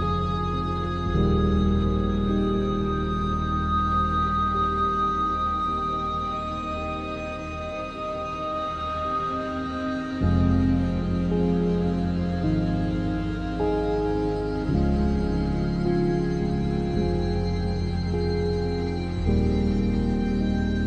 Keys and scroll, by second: 1.7 r, 2.4 Tab, 2.5 s, 3.8 s, 4.0 y, 4.5 z, 5.7 7, 6.7 e, 7.1 r, 8.5 3, 11.0 ctrl+s, 13.4 3, 14.0 Tab, 16.9 ctrl+z, 18.1 z, 18.7 ctrl+z, 19.1 Tab, 20.3 3.